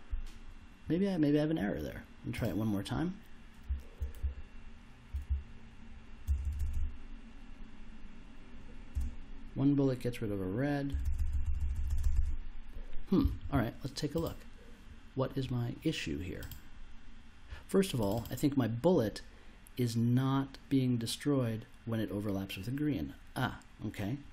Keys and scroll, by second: 3.6 s, 4.2 w, 5.2 s, 6.2 space, 8.9 space, 10.9 space.